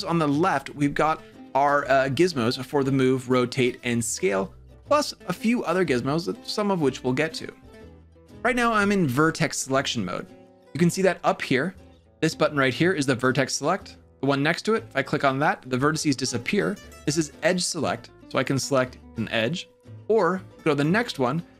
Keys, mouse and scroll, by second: 14.7 click, 18.3 click, 20.7 click.